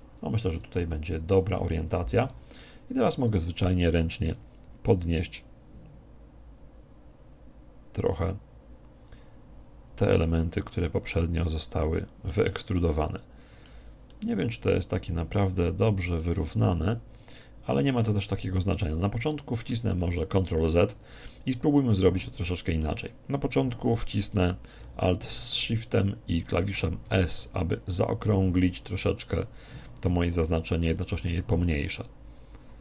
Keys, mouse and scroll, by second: 2.6-4.3 middle drag, 4.3 g, 10.2 click, 10.7-12.4 middle drag, 12.8-15.8 middle drag, 16.7-18.4 middle drag, 18.5 ctrl+z, 19.2-21.8 middle drag, 23.7 middle click, 27.1 alt+shift+s, 29.0 click, 30.1 s, 31.1 click, 31.5-32.8 middle drag.